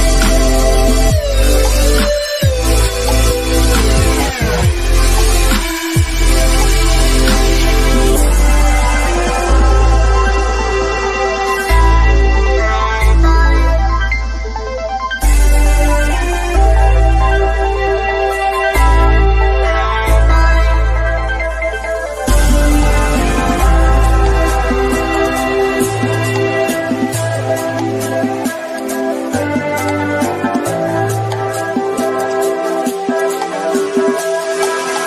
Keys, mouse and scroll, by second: 2.4 shift+middle click, 3.5-4.0 scroll up 1, 4.6 click, 6.4 scroll down 1, 7.4 Right, 11.6 click, 11.7 click, 12.6 Right, 13.8 click, 14.3 Right, 15.3 click, 17.6 scroll down 1, 18.0-19.6 shift+middle drag, 19.6 scroll down 1, 20.0 middle click, 21.2 click, 26.5 click.